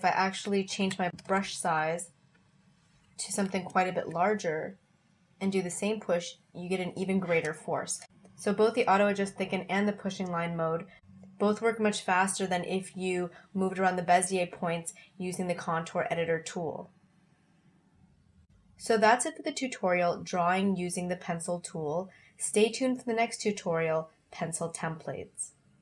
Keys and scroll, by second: 0.8 1, 1.1 0.